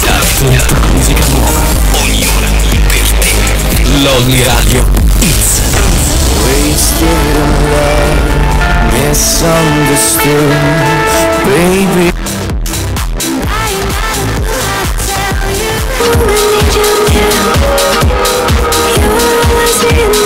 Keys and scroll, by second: 12.2 Page_Down.